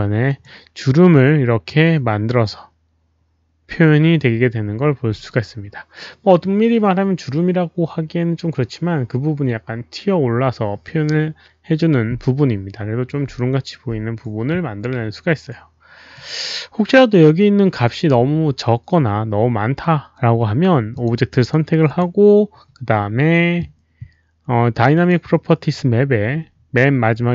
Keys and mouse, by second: 0.2 alt+click, 0.3 w, 0.9 w, 5.0 alt+click, 5.0 w, 16.1 click, 20.9 click, 21.3 click, 21.8 click, 24.9 click.